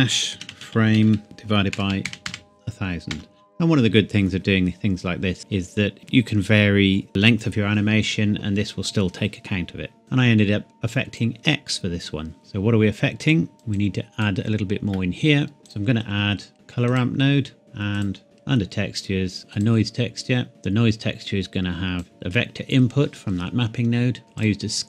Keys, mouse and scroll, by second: 0.3-2.3 typing, 3.1 KP_Enter, 10.0 click, 12.4-13.3 scroll down 1, 13.3 click, 14.0 click, 15.2 shift+middle click, 16.5 typing, 16.9 click, 19.5 click, 20.5 click, 24.4 click.